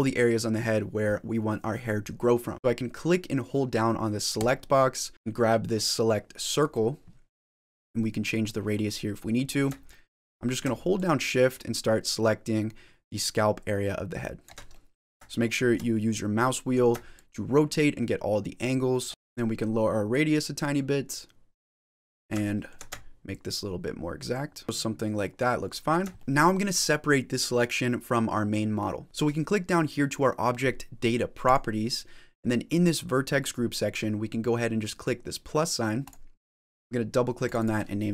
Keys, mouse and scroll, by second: 4.2 click, 7.2 middle click, 8.8 middle click, 9.7 shift+middle click, 10.8 shift+click, 14.6 middle click, 15.3 shift+middle click, 15.8 middle click, 17.0 shift+click, 19.1 shift+middle click, 19.9 click, 21.8 middle click, 22.3 shift+middle click, 23.2 shift+click, 24.6 middle click, 24.6 scroll down 3, 26.0 shift+middle click, 26.2 middle click, 31.3 click, 36.2 click, 37.3 click, 37.4 click.